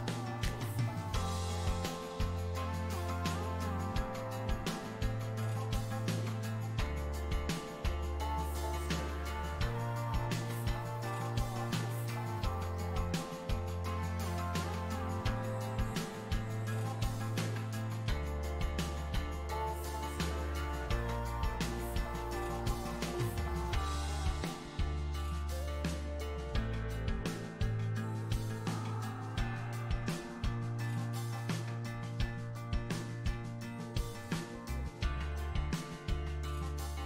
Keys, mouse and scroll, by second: 2.5 shift+c, 3.0 f, 4.1-5.2 drag, 5.2 middle click, 5.7 f, 6.4-7.9 ctrl+drag, 7.9 middle click, 8.5 f, 9.8-11.2 ctrl+drag, 11.2 space, 11.9 f, 12.6-14.5 drag, 14.5 space, 15.0 f, 15.5-18.5 drag, 19.4-21.8 drag, 21.8 middle click, 22.3 shift+click, 22.8-23.8 middle drag, 23.8-26.5 shift+drag, 26.5 f, 27.1 click, 27.8 f, 28.4-30.2 drag, 30.2 middle click, 30.7 f, 31.4-33.0 drag, 33.0 middle click, 33.6 click, 34.1 middle click, 35.1 click, 35.8 middle click, 36.5 f.